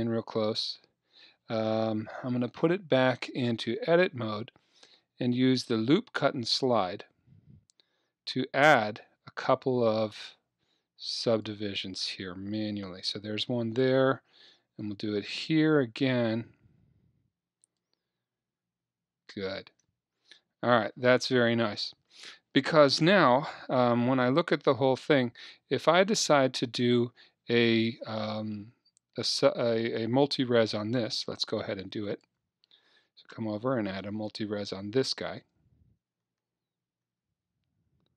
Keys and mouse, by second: 1.6-3.5 drag, 2.1 Tab, 6.5-8.8 drag, 14.8-16.8 drag, 23.4 a, 23.7 a, 24.8 middle click, 31.1-34.3 drag, 36.3 Tab, 37.1 Tab.